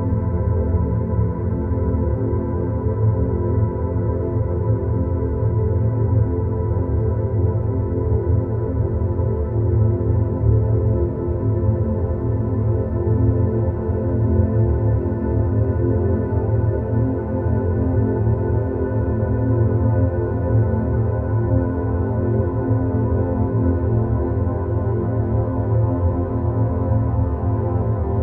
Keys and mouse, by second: 0.2-1.5 middle drag, 2.5-3.8 drag, 4.4 shift+click, 6.2 ctrl+shift+KP_Subtract, 8.1-9.9 middle drag, 16.7-17.7 middle drag, 18.9 Tab, 19.8 3, 20.3 middle click, 21.7 3, 22.1 click, 24.8-25.6 right drag, 25.7 shift+d, 27.3 click, 28.0-28.2 drag.